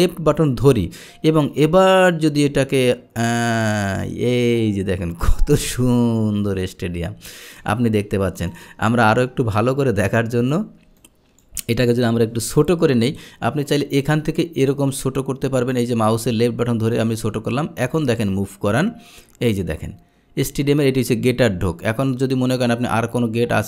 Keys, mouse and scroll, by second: 0.0-7.7 drag, 8.6 drag, 10.1 click, 11.1 click, 12.0 click, 13.8-16.3 drag, 17.1 click, 18.9-23.6 drag.